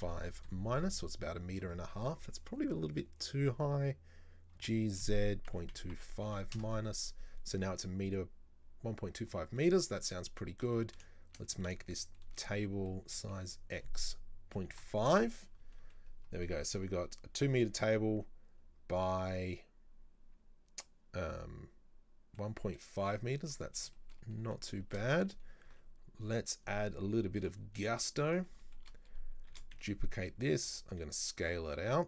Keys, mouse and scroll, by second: 4.6 g, 9.6 middle click, 10.3 right click, 10.8-11.9 middle drag, 11.9 shift+right click, 12.2 shift+middle click, 13.1 s, 15.8 middle click, 16.1-16.5 scroll up 2, 16.5-23.7 middle drag, 23.7 scroll up 2, 24.0-25.1 shift+middle drag, 25.1-25.7 scroll up 1, 25.7 ctrl+r, 27.5 click, 28.4 right click, 28.7 shift+middle click, 29.6 shift+d, 31.0 s.